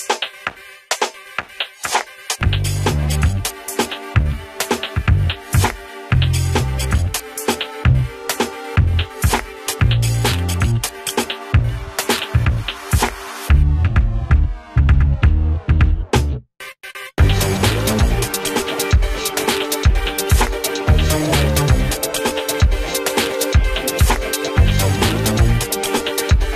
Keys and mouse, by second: 1.1 z, 1.6 click, 3.3 s, 3.8 F3, 4.4 click, 7.2 Delete, 8.2-14.8 drag, 14.8 F2, 15.1 click, 18.5 F3, 19.3 ctrl+space, 19.7 F4, 20.7 alt+click, 21.6 Right, 24.0 alt+click, 26.1 right click, 26.4 ctrl+g.